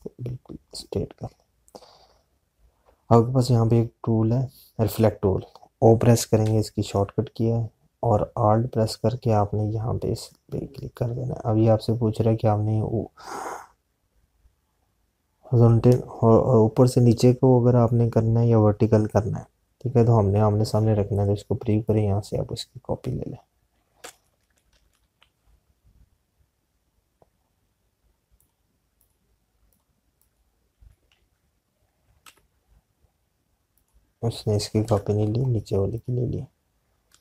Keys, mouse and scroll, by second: 11.0 alt+click, 29.2 click, 32.3 ctrl+z, 33.1 Left, 34.8 click, 35.8 Delete, 36.8 click.